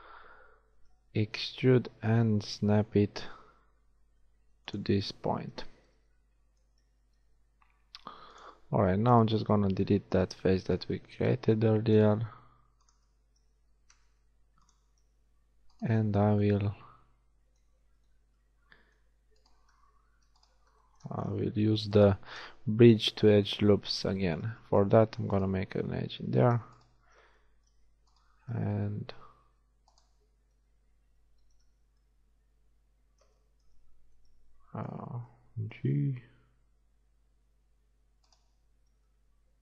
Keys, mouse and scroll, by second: 0.8 e, 5.5 z, 7.0 ctrl+Tab, 8.8 z, 9.7 z, 11.3 c, 12.2 x, 13.9 ctrl+Tab, 17.9 z, 23.4 f, 31.6 z, 35.9 g, 38.6 z.